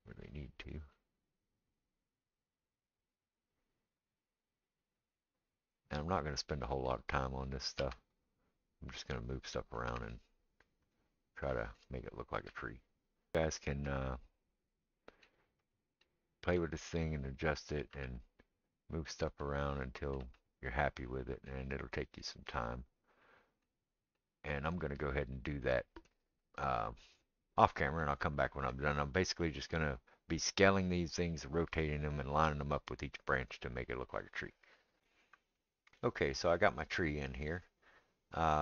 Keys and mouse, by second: 1.5-3.8 middle drag, 3.8-5.4 right drag, 5.4-5.9 middle drag, 5.9-35.0 right drag, 6.4 click, 6.4 middle click, 7.8 shift+d, 9.9 r, 12.5 g, 13.3 g, 15.6 click, 17.0-17.4 drag, 17.9 g, 20.2 g, 22.6 click, 35.0-38.6 middle drag.